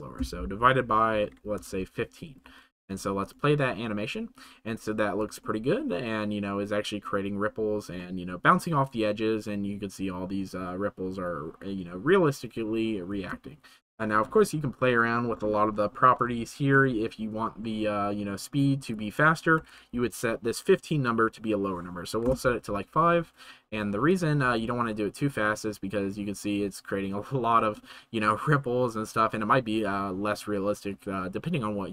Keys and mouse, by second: 3.2 click, 5.4-5.8 shift+middle drag, 7.9-8.6 middle drag, 16.2 KP_0, 16.7 KP_0, 18.4-22.3 drag, 24.0 click, 25.3-27.8 middle drag.